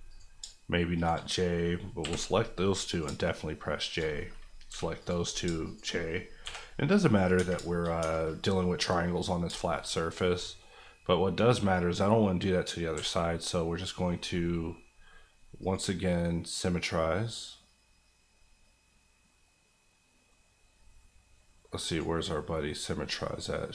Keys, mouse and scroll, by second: 0.4 shift+click, 1.2 click, 2.0 j, 2.9 click, 3.0 shift+click, 4.1 click, 4.7 j, 5.0 click, 5.4 shift+click, 5.9 click, 6.4 j, 6.7-7.3 scroll down 1, 7.3 Tab, 7.6 shift+middle click, 7.8 shift+scroll up 2, 8.0 Tab, 9.2-9.6 scroll down 2, 9.6 shift+middle click, 9.9 middle click, 10.1 scroll down 1, 10.4-12.9 middle drag, 12.9 a, 13.2 middle click, 15.6 click.